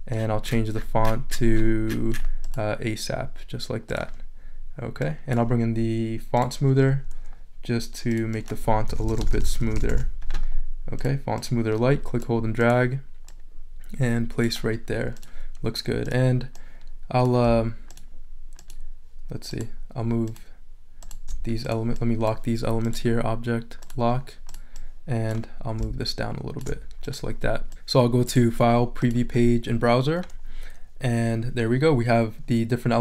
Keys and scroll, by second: 8.6-10.4 typing.